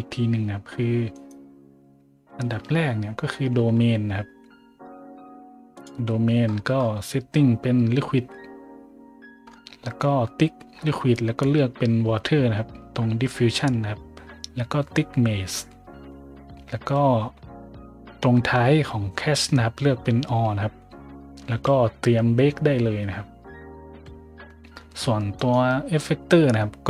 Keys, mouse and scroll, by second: 1.1 right click, 2.5 Tab, 3.5 Tab, 5.7 click, 6.8 scroll up 1, 9.4 scroll down 1, 10.8-11.3 scroll down 2, 14.2 scroll up 1, 16.0-16.5 scroll up 2, 17.2 scroll up 1, 25.3 right click.